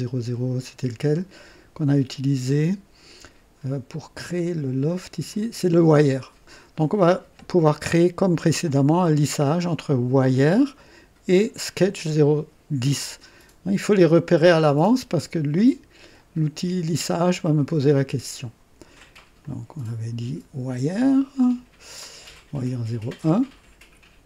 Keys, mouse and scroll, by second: 5.3 click, 17.7 click, 19.4-20.2 drag, 22.6 click.